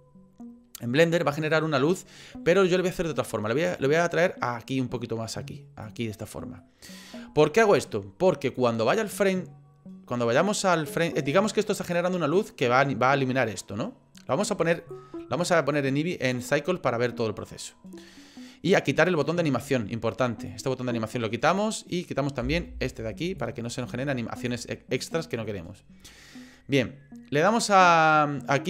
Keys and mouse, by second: 3.0 middle click, 4.0-5.8 drag, 6.7 middle click, 8.6-11.2 drag, 14.9-16.3 drag, 20.5 click, 22.4 Delete, 23.4-24.5 drag.